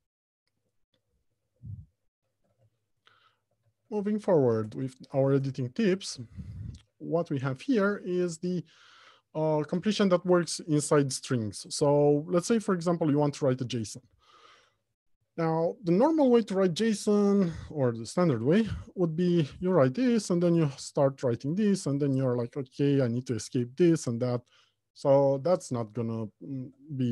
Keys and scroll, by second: 4.1 alt+Home, 4.5 Left, 5.0 Return, 25.7 ctrl+z.